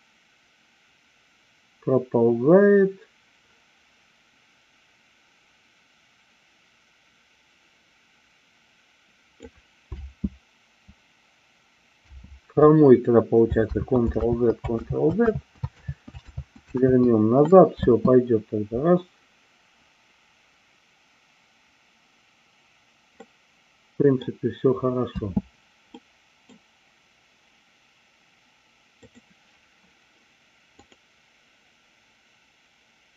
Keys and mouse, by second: 9.8 space, 13.6 ctrl+z, 14.3 ctrl+z, 14.8 ctrl+z, 15.2 ctrl+z, 15.8 ctrl+z, 16.4 ctrl+z, 16.8 ctrl+z, 17.7 space, 23.3-24.3 middle drag, 25.3 space, 25.9 middle click, 30.8 click.